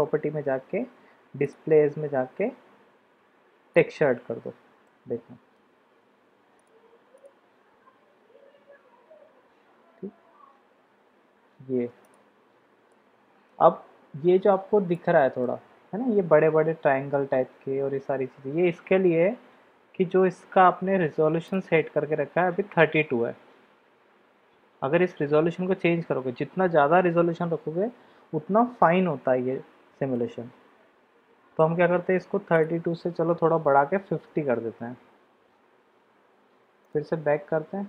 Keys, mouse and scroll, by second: 1.4-3.8 drag, 4.9-5.5 middle drag, 6.5 drag, 7.2 click, 12.3-13.5 middle drag, 14.9-15.5 middle drag, 30.1-31.7 middle drag, 32.7-35.3 drag.